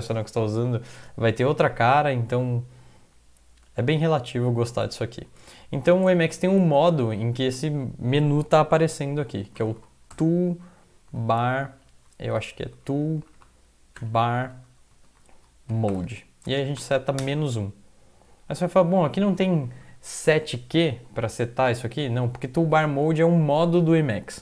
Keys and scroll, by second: 6.2-7.0 typing, 9.2-17.2 typing, 12.5 ctrl+Left, 14.9 End, 18.6 End.